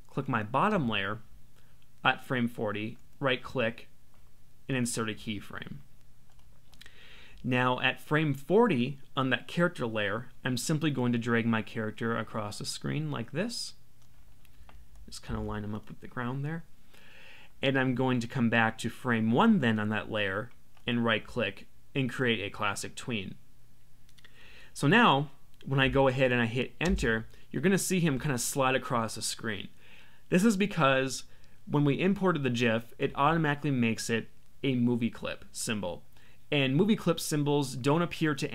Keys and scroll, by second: 15.2 Down, 26.8 Return.